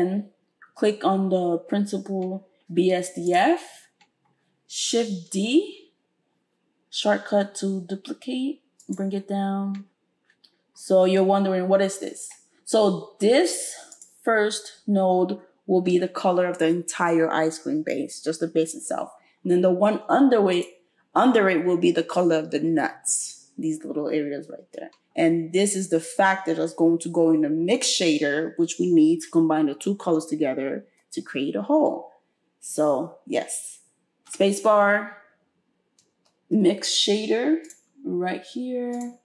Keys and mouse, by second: 3.3-14.0 middle drag, 5.4 shift+d, 14.0-34.3 drag, 34.3-39.2 middle drag, 34.3 space.